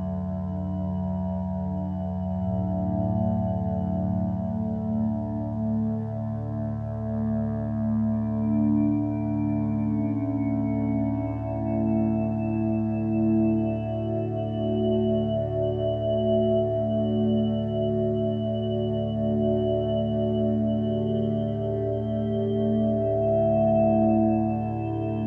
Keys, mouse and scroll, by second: 4.6 ctrl+z.